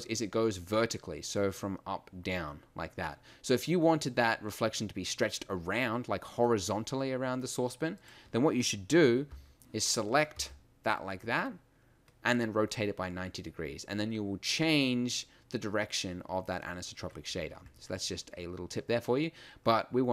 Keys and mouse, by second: 8.0-9.3 middle drag, 9.3 l, 10.3 r.